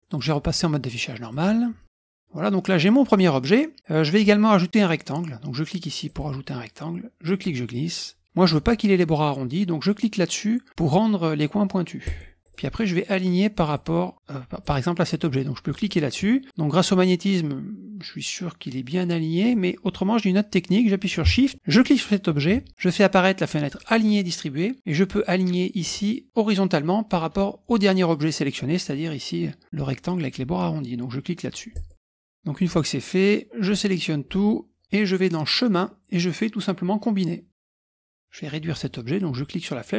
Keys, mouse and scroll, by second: 0.1 click, 1.3 click, 1.8 ctrl+scroll down 2, 2.0 middle click, 2.2-3.5 drag, 3.8 click, 6.1 click, 7.2 click, 12.0 click, 12.4 click, 13.7 click, 14.6 click, 15.7 click, 16.2 middle click, 16.5-19.9 drag, 21.7 shift+click, 23.8 click, 31.7 click, 32.0-32.3 ctrl+scroll down 1, 32.7-34.1 drag, 35.4 click, 37.7 click, 39.2-39.9 drag.